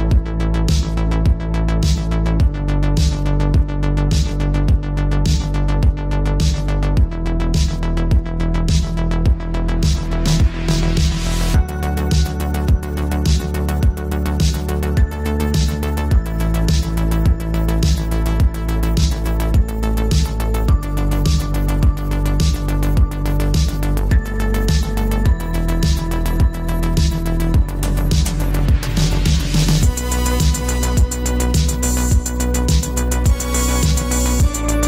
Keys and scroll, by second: 14.1 v, 26.0 6, 26.3 Return.